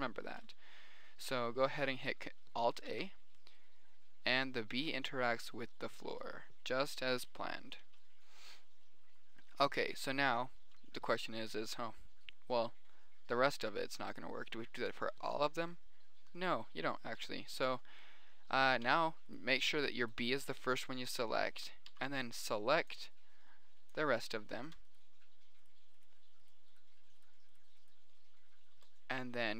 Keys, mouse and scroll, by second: 3.4 alt+a, 8.3 Escape, 19.3 b, 19.5 click, 20.7-21.3 drag, 22.3 b, 25.5-25.8 middle drag, 27.9 middle click, 28.5-29.5 middle drag.